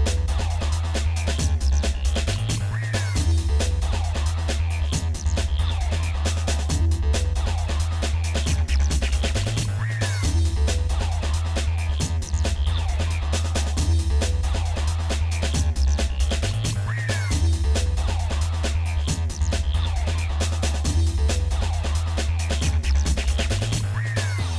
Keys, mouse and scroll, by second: 0.4 shift+click, 1.5 shift+middle click, 2.5 click, 2.9 shift+middle click, 3.7-4.2 scroll up 1, 4.2 shift+middle click, 4.2-4.5 scroll down 1, 5.8 g, 7.9 middle click, 8.3 Tab, 8.6 middle click, 9.4 Tab, 10.1 click, 11.5 g, 13.8 shift+middle click, 15.7 g, 18.3 middle click, 18.3 g, 19.0 Tab, 20.3 click, 21.1 Tab, 22.1 click, 22.8 shift+middle click, 23.9 shift+middle click.